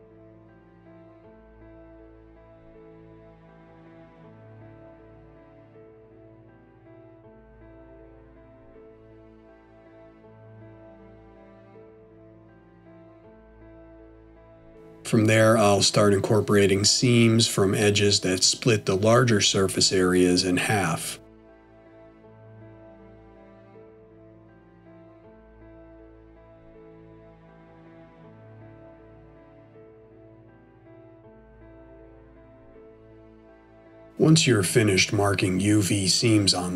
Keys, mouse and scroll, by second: 1.1 middle click, 4.2 click, 5.1 alt+shift+click, 7.0 middle click, 8.5 shift+middle click, 10.1 middle click, 15.9 alt+shift+click, 18.2 middle click, 19.9 scroll down 1, 20.7 middle click, 22.9 alt+shift+click, 24.8 middle click, 28.1 middle click, 28.1 scroll down 1, 28.2 click, 28.4 alt+shift+click, 28.6 shift+middle click, 28.6 middle click, 28.8 alt+shift+click, 28.9 middle click, 29.0 scroll down 1, 29.1 middle click, 29.4 alt+shift+click, 29.5 middle click, 29.9 alt+shift+click, 29.9 middle click, 30.2 alt+shift+click, 30.3 middle click, 30.4 right click, 30.6 middle click, 31.1 click, 31.2 alt+shift+click, 31.3 middle click, 31.3 scroll up 1, 31.4 scroll down 1, 31.5 middle click, 31.8 right click, 31.9 middle click, 32.0 scroll up 1, 32.1 middle click, 32.1 scroll down 1, 32.2 middle click, 32.4 click, 32.5 alt+shift+click, 32.5 middle click, 32.8 scroll down 1, 33.0 right click, 33.1 middle click, 33.2 click, 33.3 alt+shift+click, 33.4 right click, 33.5 middle click, 33.7 middle click, 33.7 scroll down 1, 34.7 middle click, 36.2 a.